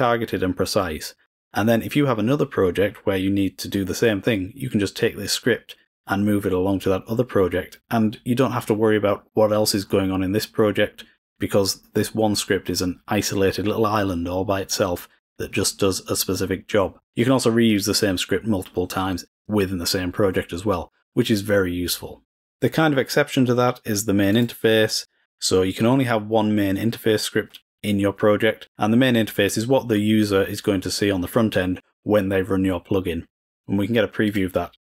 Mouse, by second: 24.2-24.8 drag, 34.2-34.7 drag.